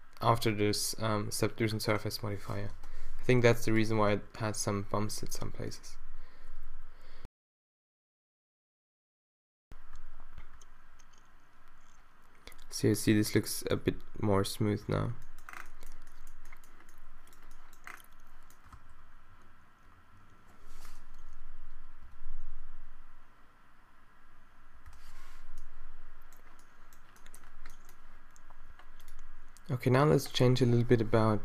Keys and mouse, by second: 2.9 shift+Left, 3.8 click, 4.1 alt+a, 15.3 alt+a, 18.7 alt+a, 21.9 shift+Left, 22.2 shift+Left, 25.1 alt+shift+a.